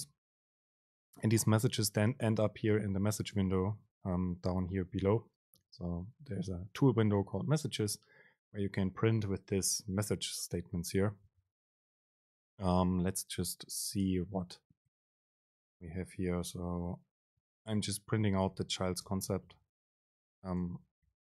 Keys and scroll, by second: 19.1 Right, 19.3 super+space.